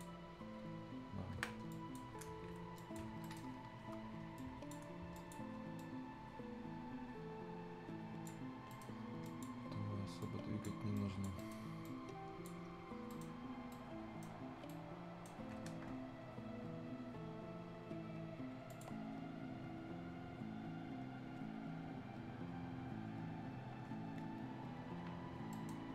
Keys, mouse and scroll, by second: 1.3 Escape, 1.7 click, 2.6 scroll up 1, 2.7 click, 3.0 scroll down 1, 3.2 right click, 3.8 F10, 4.0-4.3 scroll up 1, 4.3 click, 4.9 scroll up 1, 5.1-8.4 drag, 8.4 scroll down 1, 8.7 right click, 8.9-9.2 scroll up 1, 9.2 click, 9.5-10.2 scroll up 1, 10.2 click, 11.3 right click, 11.8 click, 12.5 scroll down 1, 13.0 right click, 14.4 scroll up 1, 14.6 right click, 15.5 Escape, 18.6 Escape, 24.1-24.4 scroll down 1, 25.5 right click, 25.8 scroll up 1.